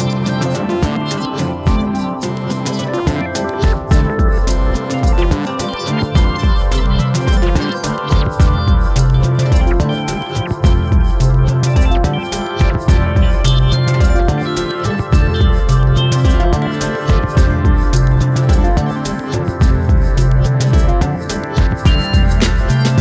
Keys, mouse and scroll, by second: 1.7-2.7 drag, 2.8 s, 7.6 click, 8.3 click, 8.8-9.9 drag, 10.1 s, 14.4-14.8 scroll up 1, 14.8 click, 15.3 s, 19.0 click, 19.6 s, 22.0 click, 22.5 s.